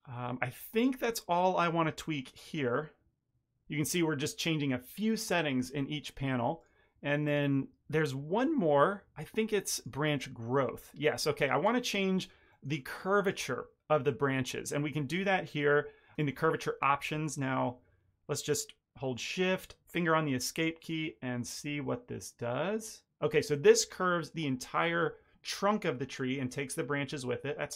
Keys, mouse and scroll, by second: 1.6 middle click, 6.5 click, 12.4 middle click, 12.7 ctrl+middle click, 20.9 click.